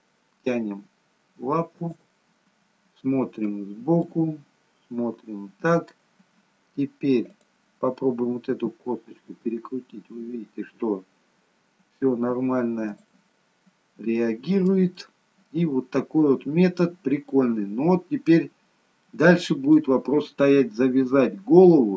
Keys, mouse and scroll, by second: 2.4 middle click, 4.1 middle click, 7.3 click, 8.4 r, 13.4 middle click, 15.0 middle click, 18.2 scroll up 1, 19.0 middle click.